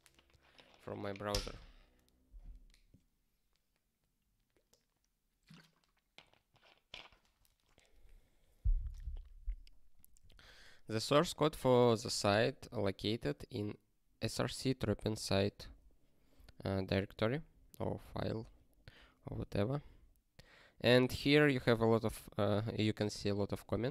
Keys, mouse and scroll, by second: 9.9 click, 19.3 click.